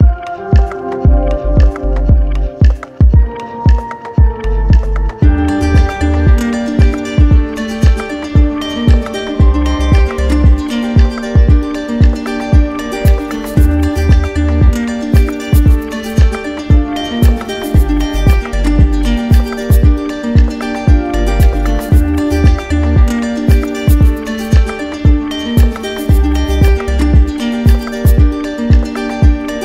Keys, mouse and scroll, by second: 1.6 right click, 5.2 right click, 5.7 shift+right click, 6.9 shift+right click, 10.0 ctrl+click, 12.3 ctrl+click, 13.2 ctrl+click, 13.7 r, 16.3 alt+click, 18.3 click, 19.4 ctrl+click, 20.6 ctrl+click, 21.0 ctrl+click, 23.6 alt+click, 25.1 click, 25.7 ctrl+click, 27.3 right click, 27.8 right click, 28.3 right click, 29.3 right click.